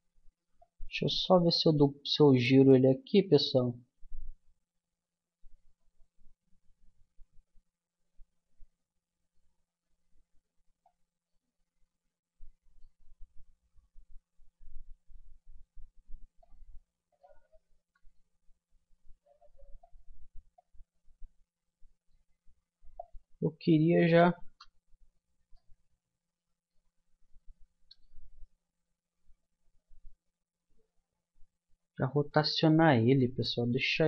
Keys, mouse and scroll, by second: 1.0 middle click, 1.5-3.1 middle drag, 10.9-12.7 drag, 13.8-15.6 drag, 17.1-18.8 drag, 20.6-22.4 drag, 23.0-24.8 drag, 25.5-27.5 middle drag, 28.0 w.